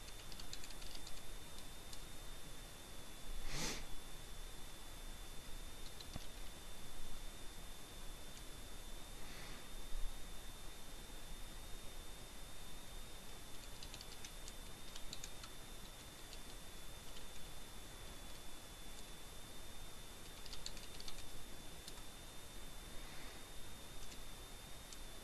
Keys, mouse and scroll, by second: 0.5 i, 14.0-15.9 typing, 17.3 w, 20.5 t, 25.0-25.2 typing.